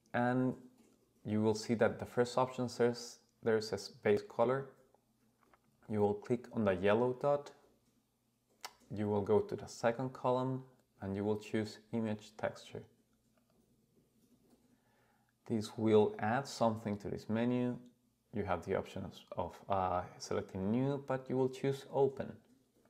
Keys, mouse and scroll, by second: 0.2-1.1 scroll down 3, 6.9-13.5 drag, 22.8 click.